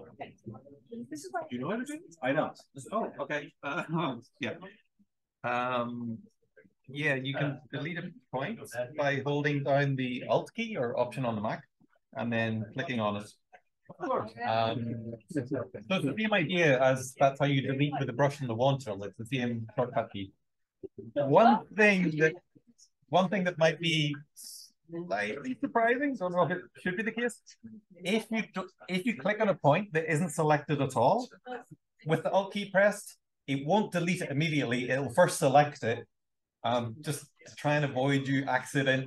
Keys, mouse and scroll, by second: 5.4-6.0 scroll down 1, 6.7 click, 13.1 alt+click, 27.7-28.5 alt+scroll down 1, 28.5-29.8 scroll down 1, 29.8-30.8 alt+scroll down 1, 30.8 alt+click, 30.8-31.9 alt+scroll down 1, 31.9-37.1 scroll down 1, 37.1-39.0 scroll down 1.